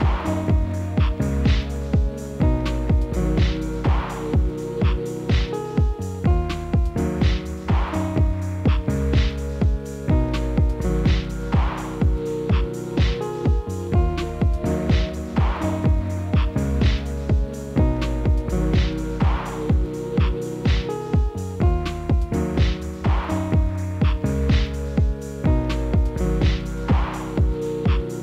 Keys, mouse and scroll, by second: 0.2 drag, 0.4 scroll down 1, 0.4-1.0 middle drag, 1.0-1.8 scroll up 5, 1.8 shift+middle click, 2.1 shift+a, 3.5 s, 4.4 s, 6.3 g, 7.2 KP_7, 7.7 s, 9.0 Tab, 9.6 ctrl+r, 11.5 g, 13.1 s, 15.2 ctrl+r, 16.2 s, 17.7 middle click, 18.3 scroll up 3, 18.5-19.6 shift+middle drag, 19.6 3, 19.7 click, 20.2 shift+click, 20.7 shift+click, 21.1 shift+click, 21.5 KP_1, 22.1 e, 23.6 scroll down 1, 23.9 middle click, 24.3-25.2 scroll down 1, 25.2-27.6 middle drag, 27.8 ctrl+r.